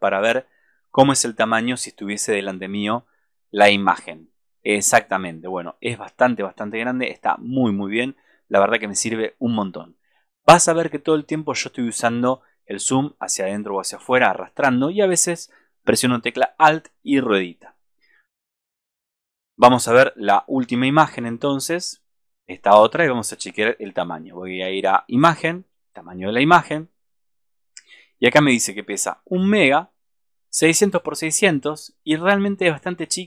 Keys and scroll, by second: 29.2 super+=.